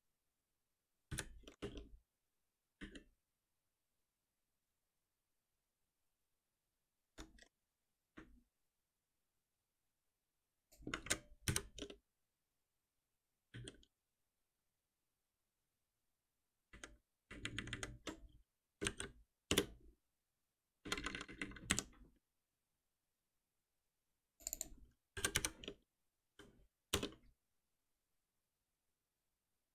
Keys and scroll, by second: 1.1 ctrl+alt+n, 11.5 ctrl+alt+n, 19.5 Return, 21.6 Delete, 26.9 Return, 28.2 ctrl+s.